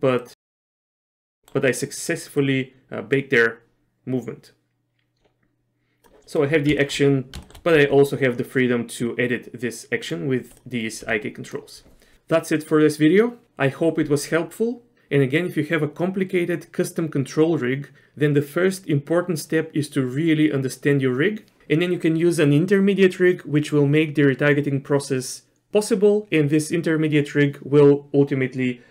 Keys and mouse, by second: 0.3 click, 1.2 shift+middle click, 1.5 middle click, 2.5-6.1 drag, 6.3 middle click, 6.9 shift+middle click, 7.5 shift+middle click, 7.8 g, 11.1 g.